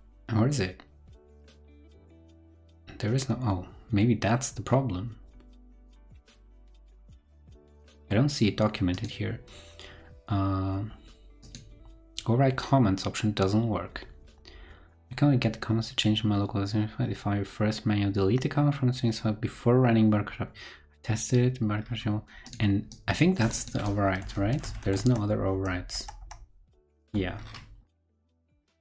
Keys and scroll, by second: 24.4 super+c, 24.6 super+f, 24.8 super+v.